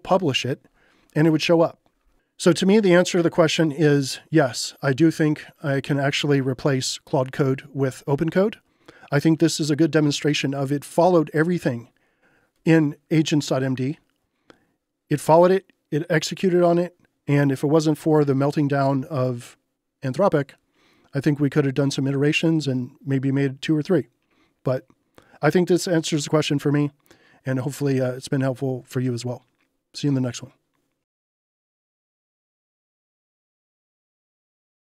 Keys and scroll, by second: 2.4-3.3 typing.